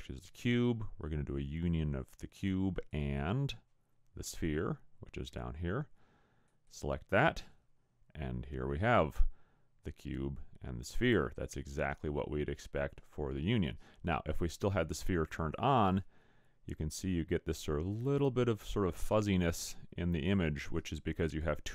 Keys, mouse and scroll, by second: 2.9 click, 15.3 click.